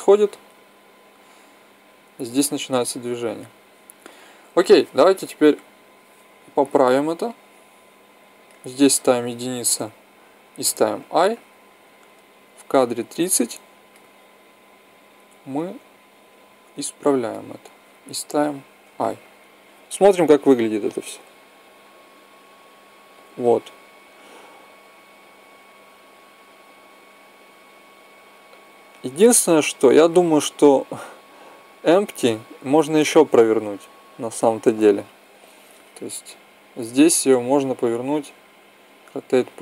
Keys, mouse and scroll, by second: 4.5 Left, 10.9 i, 12.0-13.9 drag, 13.9-15.1 middle drag, 15.1-17.2 drag, 17.2-19.8 middle drag, 19.8-21.7 drag, 34.0-35.9 drag, 38.8 r.